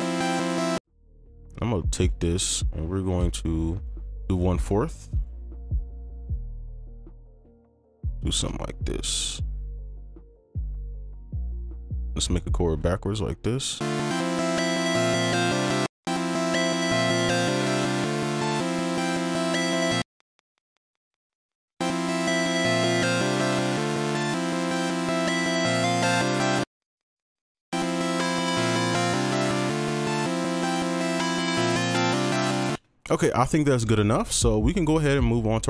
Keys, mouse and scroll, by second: 0.7 space, 1.0 ctrl+click, 5.9 ctrl+click, 6.7 alt+click, 7.6 shift+click, 9.1 shift+click, 10.5 shift+click, 12.6 shift+click, 13.8 space, 15.8 space, 16.0 space, 17.4 space, 17.5 ctrl+click, 18.6 shift+click, 19.6 right click, 20.3 space, 20.4 ctrl+click, 21.5 right click, 23.3 space, 23.4 ctrl+a, 24.2 ctrl+click, 25.4 alt+click, 26.5 right click, 26.8 ctrl+click, 27.5 ctrl+Down, 27.5 right click, 32.4 right click, 33.3 space, 33.4 double click.